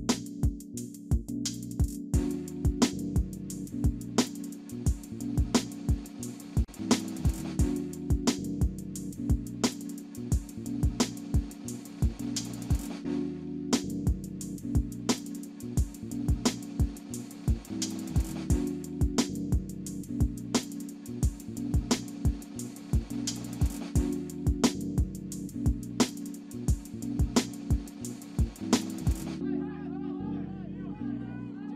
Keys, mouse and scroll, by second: 0.1 alt+middle click, 0.6 alt+click, 2.7 scroll down 1, 3.2 alt+middle click, 3.7 alt+click, 4.7 ctrl+z, 5.2 scroll down 1, 5.6 alt+middle click, 6.0 alt+click, 8.3 ctrl+z, 8.6 middle click, 9.2 scroll down 1, 9.4 scroll up 1, 11.0 alt+middle click, 11.7 shift+click, 13.1 scroll down 1, 13.4 alt+middle click, 13.8-14.1 alt+scroll up 1, 14.9-15.4 scroll down 1, 15.5 middle click, 15.9-17.0 scroll up 1, 17.0 middle click, 18.6 scroll down 1, 18.9 middle click, 20.0-20.4 scroll down 1, 20.4 middle click, 29.9 scroll down 1, 30.1 alt+middle click, 30.6 scroll up 1, 31.3 scroll down 1, 31.6 alt+middle click.